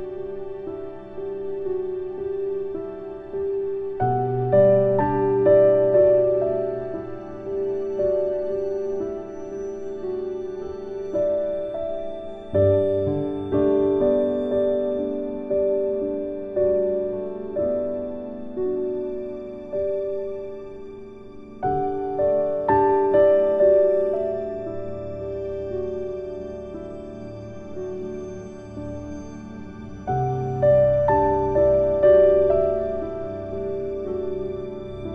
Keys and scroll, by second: 33.2 ctrl+z.